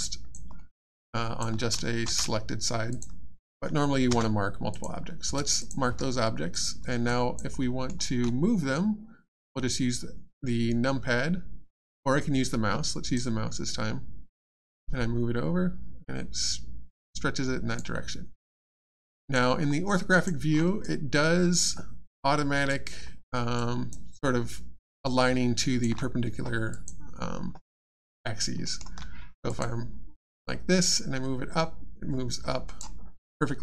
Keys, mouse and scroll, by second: 0.0 alt+click, 0.6 alt+middle click, 0.7 alt+scroll down 1, 1.1 alt+click, 1.7 shift+click, 2.0 alt+shift+space, 2.9 click, 4.1 space, 4.7 click, 5.2 space, 5.6 click, 5.8 space, 6.5 click, 7.1 alt+click, 7.6 alt+middle click, 13.1 right click, 18.7 alt+click, 19.6 alt+scroll down 1, 19.9 alt+click, 20.5 alt+scroll up 1, 20.8 alt+click, 23.1 alt+scroll down 2, 23.5 alt+click, 24.2 alt+scroll up 1, 24.8 alt+click, 26.7 click, 27.7 alt+click, 28.6 alt+middle click, 29.5 middle click, 29.5 click, 30.1 space, 30.9 right click.